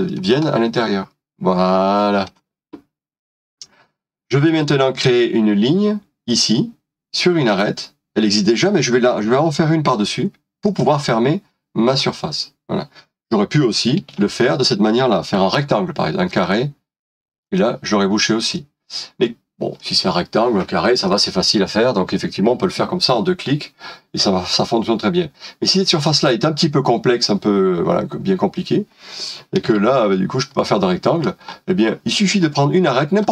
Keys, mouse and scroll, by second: 9.9 l, 14.1 typing, 15.3 typing, 18.5 middle click, 29.7 ctrl+z, 30.5 middle click, 31.6 scroll up 1, 32.4 middle click.